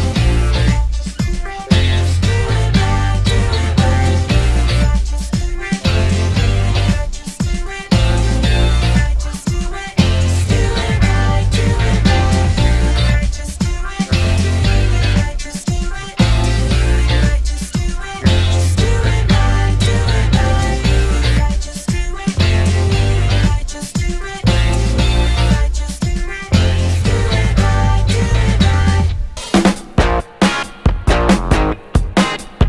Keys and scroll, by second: 5.1 Escape, 5.3 d, 5.7 d, 6.2 Return, 7.1 3.